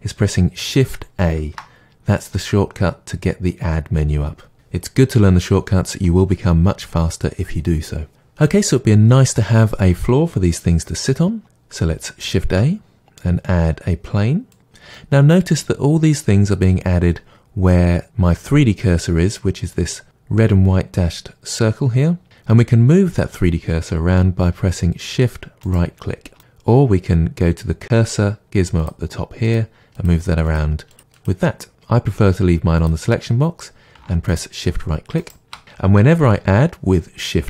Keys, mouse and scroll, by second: 1.3 shift+a, 8.1-25.6 middle drag, 12.4 shift+a, 25.6 shift+right drag, 28.8 click, 29.4-30.6 drag, 30.9 click, 31.1 click, 32.8 click, 34.3-35.3 shift+right drag.